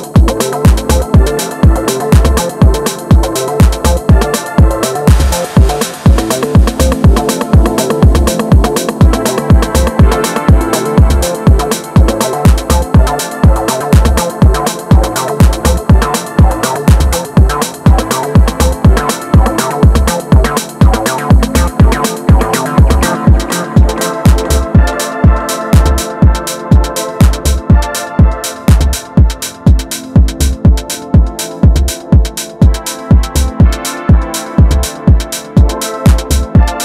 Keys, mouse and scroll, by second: 0.7 middle click, 1.6 scroll up 1, 1.9-8.2 middle drag, 8.2 click, 8.8-11.2 middle drag, 11.2 ctrl+shift+click, 13.5 i, 18.6 e, 21.0 middle click, 21.6 Tab, 22.0-23.8 middle drag, 23.8 scroll down 1, 24.0-25.9 middle drag, 25.9 Tab, 26.1-27.8 middle drag, 27.8 alt+click, 28.5 s, 30.8-32.6 middle drag, 32.6 Tab, 32.9-34.4 middle drag, 34.4 Tab, 35.4 click.